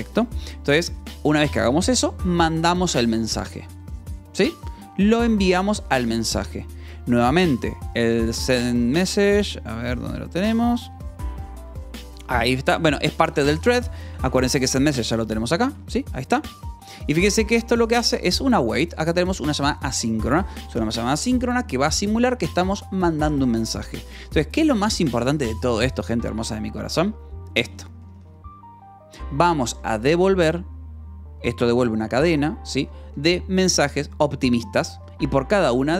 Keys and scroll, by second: 1.5 j, 2.5 shift+v, 6.4 Escape, 6.4 k, 7.3 k, 8.0 j, 10.4 h, 11.4 d, 12.2 v, 12.6 Escape, 13.2 j, 14.3-21.7 typing, 16.9 Escape, 20.4 Escape, 24.0 Escape, 25.4 k, 26.5 k, 27.2 j, 27.7 j, 29.7 Escape, 32.5 j, 32.8 k, 34.4 shift+v, 34.9 Escape.